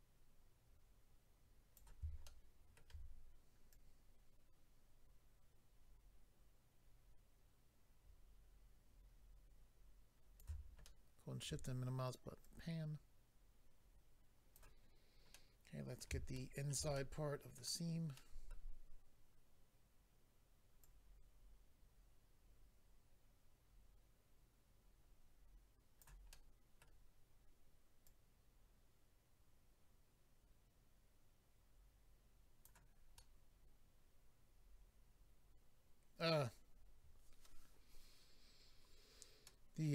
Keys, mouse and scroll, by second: 2.2 shift+middle click, 3.7 click, 10.8 shift+middle click, 12.4 click, 14.9-15.3 scroll down 2, 15.3 middle click, 16.3 shift+middle click, 16.7 middle click, 16.9 middle click, 18.1 middle click, 20.8 click, 26.3 middle click, 28.0 click, 33.1 middle click, 38.8 scroll down 1, 39.4 middle click.